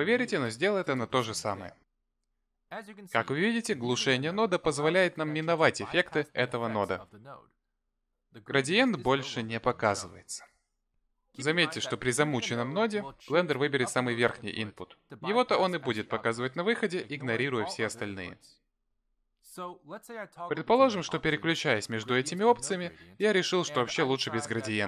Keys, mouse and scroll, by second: 0.0 m, 2.2 m, 4.6 m, 20.7 m, 21.6 m, 23.4 m.